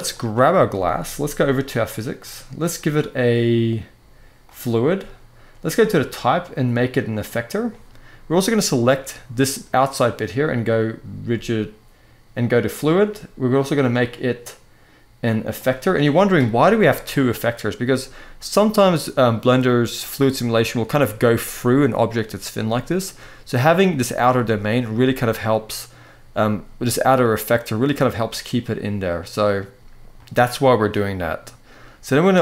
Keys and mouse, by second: 4.3 click, 5.5-7.0 drag, 8.2 click, 12.4 click, 13.7-15.5 drag, 16.7 click, 20.5-20.8 middle drag, 22.3-22.8 middle drag, 24.6-26.0 middle drag, 28.8-29.3 middle drag, 29.9-31.0 middle drag.